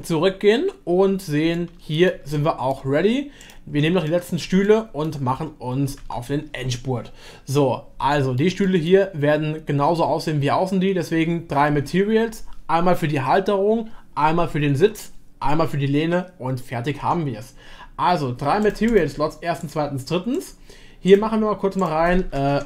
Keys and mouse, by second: 1.5-2.1 middle drag, 2.3 shift+middle click, 3.4 click, 4.0 middle click, 4.6 shift+middle click, 6.0 Tab, 8.1 middle click, 8.6 shift+middle click, 18.6 click, 18.9 click, 19.6-20.5 drag, 21.1-22.6 drag.